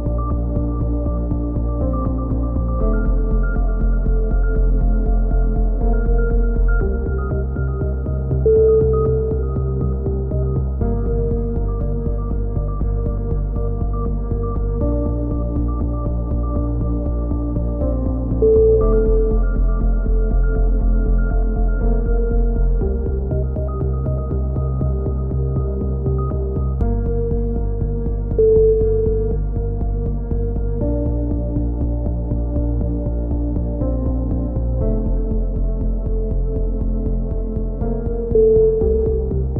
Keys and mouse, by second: 0.4 right click, 1.3 click, 1.6 a, 1.8-4.0 drag, 4.0 middle click, 4.4-5.7 middle drag, 6.1-7.1 drag, 7.1 middle click, 7.4-8.5 right drag, 9.4-10.5 drag, 10.6-11.8 drag, 11.9 middle click, 12.1 a, 12.4 click, 13.6-15.1 right drag, 14.9 f, 15.1 a, 15.3 middle click, 15.7 click, 17.7 click, 18.2-19.8 right drag, 19.9 click, 20.3 middle click, 21.0-22.5 drag, 22.5 middle click, 23.2 shift+q, 23.6 a, 24.6 Tab, 28.8 KP_3, 29.3 z, 31.2 z, 31.9 z, 36.6 z, 37.2-39.5 drag.